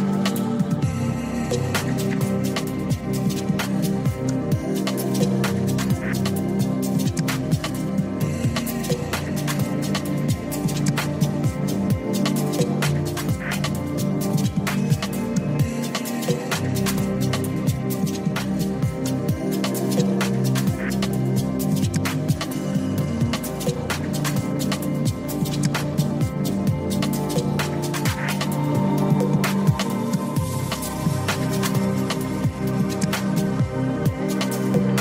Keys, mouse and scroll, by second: 0.1 z, 5.1 click, 5.9 ctrl+z, 8.0 click, 9.2-12.7 typing, 11.2 click, 14.1-14.8 z, 16.0 click, 17.0 ctrl+z, 18.5-19.8 drag, 20.9 click, 22.2 click, 24.4 g, 25.9 click, 26.9 click, 29.4 g, 31.3 click, 32.0-33.4 drag, 34.4 g.